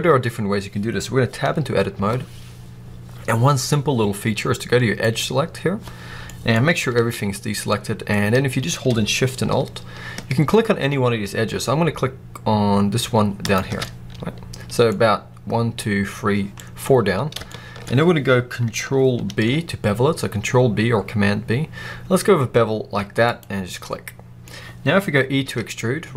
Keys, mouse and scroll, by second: 1.9 Tab, 4.9 click, 6.2-8.1 middle drag, 6.8 alt+a, 7.1-7.7 scroll up 1, 8.1-10.8 scroll down 1, 13.3 alt+shift+click, 13.7 middle click, 16.4-16.7 scroll up 1, 17.5-23.1 middle drag, 19.2 ctrl+b, 23.3 click, 23.7 scroll up 1, 23.9 middle click, 24.1 middle click, 24.3 middle click, 24.4 scroll down 1, 25.3 e.